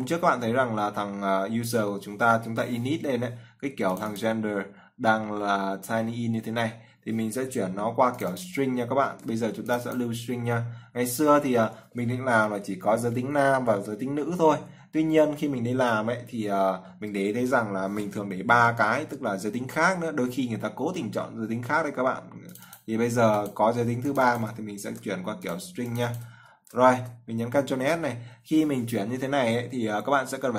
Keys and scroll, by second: 9.4 ctrl+c, 25.2 ctrl+c, 26.8 ctrl+v, 27.8 ctrl+s.